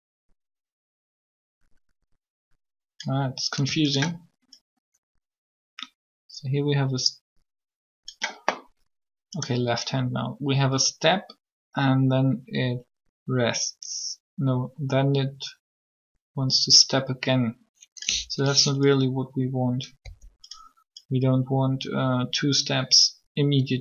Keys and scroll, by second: 20.0 r.